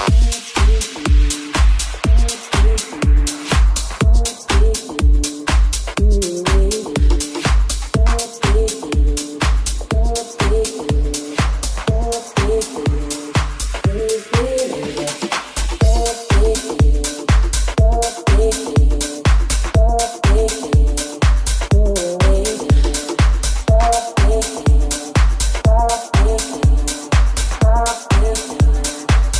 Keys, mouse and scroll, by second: 2.2-7.7 middle drag, 4.0 right click, 7.7 right click, 7.7-12.9 middle drag, 12.9 right click, 12.9-18.2 middle drag, 18.2 right click, 18.3-21.6 middle drag, 21.6 right click, 21.6-26.3 middle drag, 26.3 right click, 26.4 middle click, 27.0-29.0 middle drag, 29.2 shift+middle click.